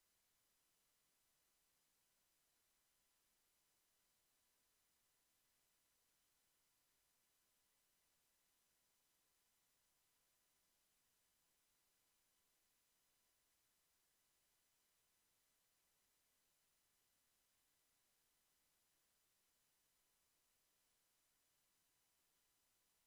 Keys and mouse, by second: 0.0 r, 2.7 Tab, 4.0 a, 5.1 Tab, 7.8 s, 9.8 s, 12.2 Tab, 19.0 a, 19.5 ctrl+s, 20.6 KP_1.